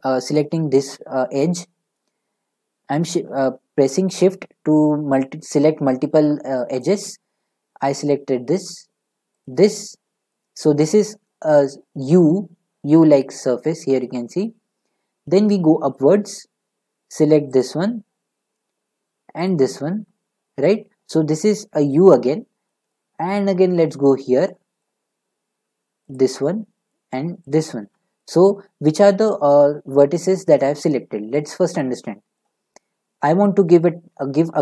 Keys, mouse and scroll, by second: 0.3 middle click, 6.8 shift+click, 9.4 shift+click, 10.6 middle click, 15.9-16.5 scroll, 17.6 shift+click, 19.5 shift+click, 24.8 middle click, 26.2 shift+click, 27.5 shift+click, 31.3 scroll.